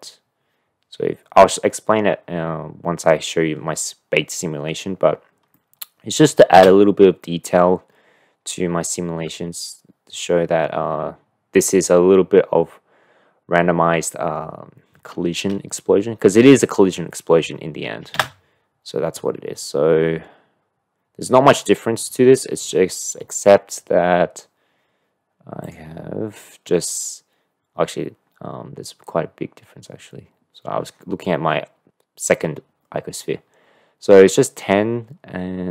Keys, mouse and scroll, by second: 5.6-6.2 drag, 6.5 space, 19.3 space.